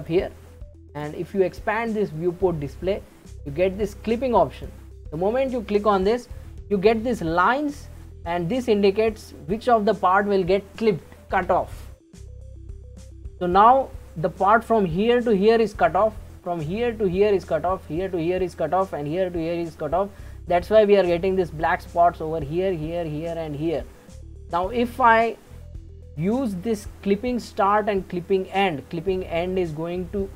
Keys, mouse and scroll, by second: 0.9-4.0 drag, 4.6 click, 5.2-8.2 scroll down 2, 8.2 scroll up 2, 9.2-12.4 shift+middle drag, 28.9-30.3 scroll down 13.